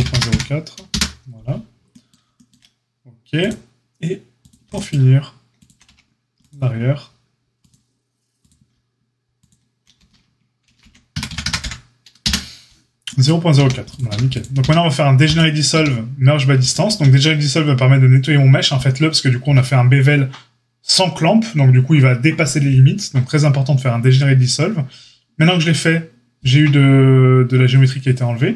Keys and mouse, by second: 3.4-4.4 drag, 5.6 shift+click, 5.8 x, 7.5 click, 9.3 shift+click, 9.4-28.5 shift+middle drag, 10.6 ctrl+shift+b, 13.5 a, 14.0 a, 14.5 q, 15.7 q, 16.8 q.